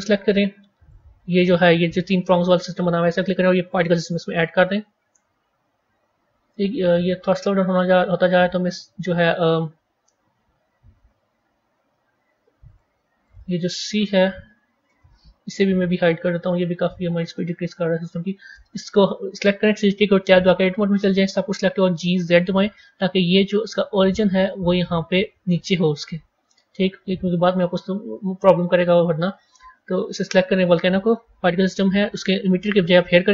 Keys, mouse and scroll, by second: 0.8 click, 3.6-6.5 drag, 6.5-9.3 scroll down 3, 12.6 click, 13.3-16.3 drag, 17.2 click, 18.5 click, 20.2 Tab, 21.5 g, 26.2 Tab, 28.3 click.